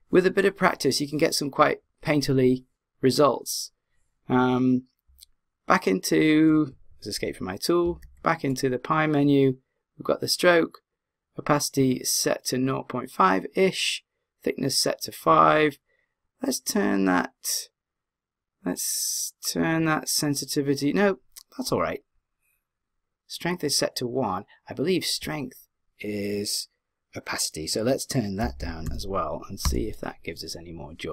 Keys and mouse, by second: 7.8 d, 8.1 w.